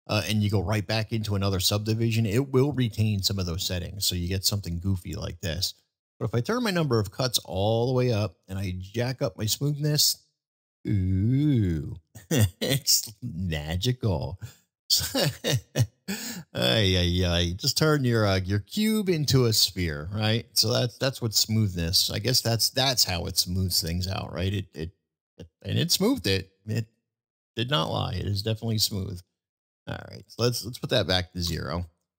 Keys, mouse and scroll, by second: 6.6 click, 8.9 click, 10.2-11.9 middle drag, 13.3-13.8 middle drag, 14.2-14.5 middle drag, 15.0 middle drag, 16.1 middle click, 17.8 middle click, 19.3-20.5 middle drag, 22.0-22.5 middle drag, 23.4-23.9 middle drag, 24.2-27.1 middle drag, 28.6-32.1 drag.